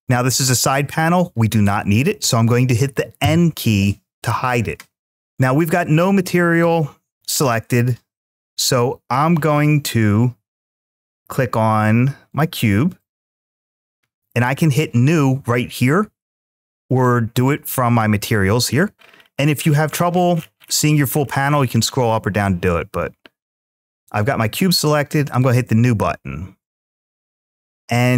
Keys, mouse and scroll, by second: 12.1-13.5 drag, 25.2 drag, 27.9-28.1 middle drag.